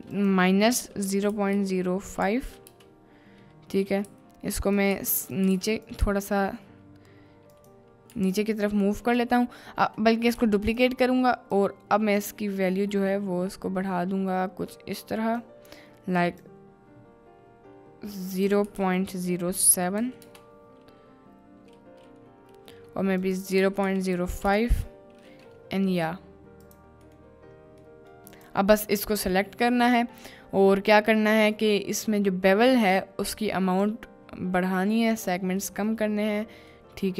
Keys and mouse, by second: 0.1-2.7 drag, 4.1-6.1 typing, 8.1 g, 8.3 z, 10.4 shift+d, 11.6-15.4 drag, 16.3 click, 18.5-20.2 drag, 23.2-24.5 drag, 26.7 click, 27.1 middle click, 27.8 middle click, 28.3 click, 30.1 middle click, 33.0 click, 34.8 click, 35.8 middle click, 36.8-37.1 middle drag.